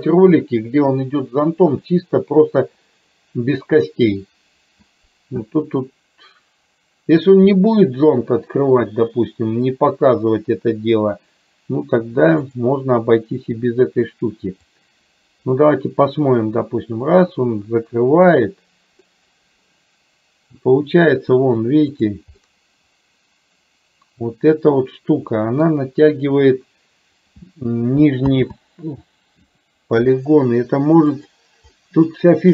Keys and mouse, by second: 12.6 click, 14.7-19.0 drag, 19.2-20.8 middle drag, 22.0 click, 22.5-25.7 middle drag, 28.6 ctrl+z, 31.2 click, 31.8-32.5 middle drag.